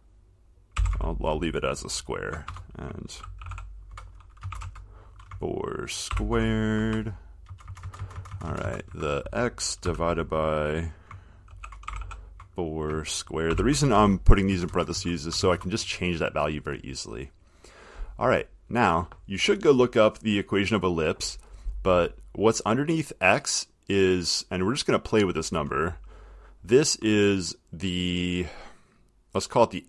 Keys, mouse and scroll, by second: 0.7-1.4 typing, 2.6-7.7 typing, 11.7-14.7 typing, 15.6 Left, 19.0 click, 24.5 click.